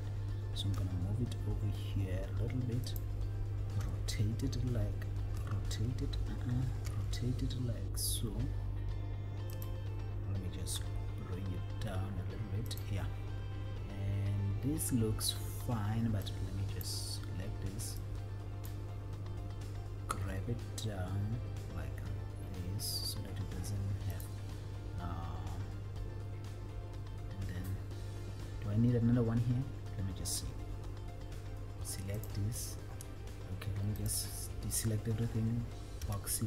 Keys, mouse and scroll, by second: 0.9 g, 3.2 click, 4.0 t, 5.5 t, 7.0 r, 9.9 click, 11.0 g, 13.1 click, 16.4 click, 18.4 click, 20.5 g, 24.6 click, 32.3 shift+click, 34.1 click, 36.2 b.